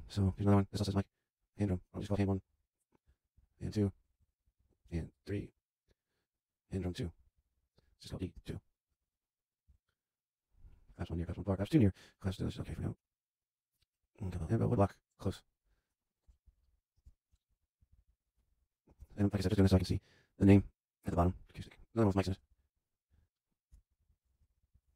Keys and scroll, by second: 2.1 Delete, 3.2 super+Left, 3.4 Right, 3.7 Delete, 4.2 super+Down, 4.3 super+Left, 4.5 Right, 4.7 Delete, 5.5 super+Down, 7.1 Left, 7.3 Right, 7.6 Delete, 8.2 2, 8.4 space, 8.9 BackSpace, 9.8 super+Down, 16.2 Delete, 16.8 shift+Delete, 17.2 shift+super+b, 17.4 super+Down, 17.7 super+Right, 17.8 Left, 18.1 BackSpace, 18.8 shift+BackSpace, 18.9 shift+b, 19.4 Return, 22.0 Right, 22.5 Delete, 23.0 Left, 23.7 super+Down, 23.9 super+Right, 24.0 Left, 24.1 BackSpace, 24.4 super+Down, 24.5 super+Right, 24.6 Left, 24.7 BackSpace.